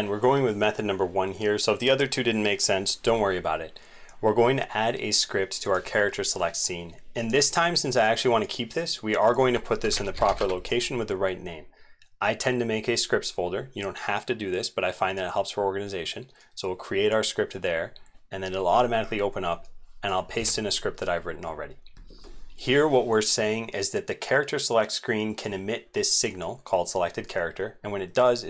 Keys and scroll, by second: 20.3 ctrl+v.